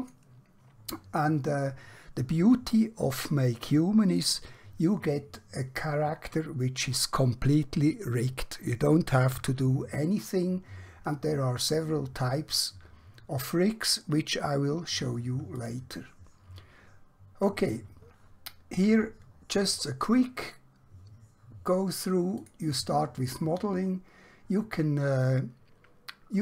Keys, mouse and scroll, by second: 4.2 click, 15.8 click, 22.3 click.